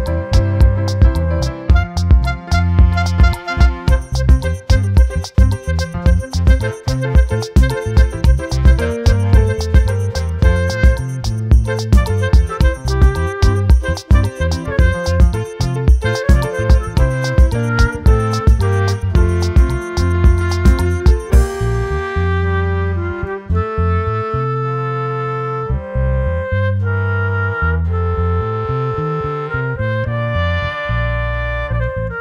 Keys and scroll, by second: 13.5 ctrl+t, 24.9 ctrl+t.